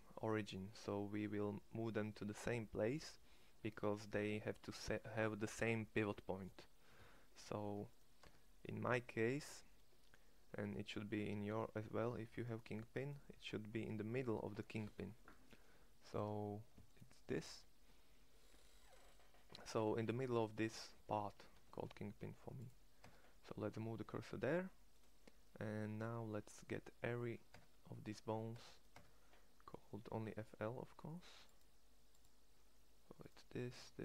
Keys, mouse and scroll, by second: 7.5 Tab, 8.3 Tab, 9.5 middle click, 10.7 middle click, 14.8-16.8 middle drag, 16.8-18.2 drag, 18.2 middle click, 18.3 click, 21.7 shift+s, 23.0 Tab, 27.7 Tab, 28.5 Tab, 28.9 Tab.